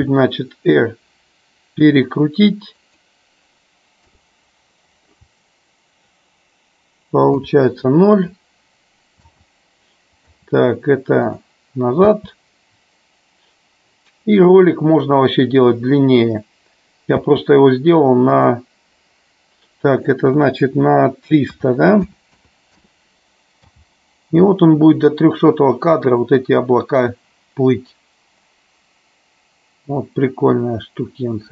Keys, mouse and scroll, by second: 2.9 click, 4.2 KP_0, 7.4 KP_0, 9.3 space, 10.4 space, 11.4 click, 17.3 space, 18.4 click, 20.0-23.0 drag, 22.3 KP_0, 23.7 space.